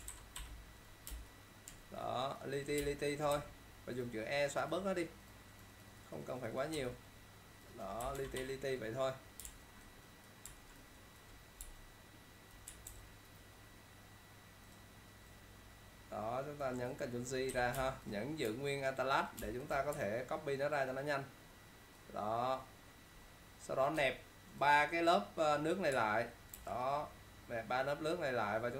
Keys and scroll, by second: 0.2 ctrl+0, 1.2 ctrl+space, 2.1 typing, 2.9 ctrl+space, 3.4 e, 8.3 ctrl+0, 8.4 -, 13.0 ctrl+alt+t, 19.5 alt+space, 26.7 ctrl+e.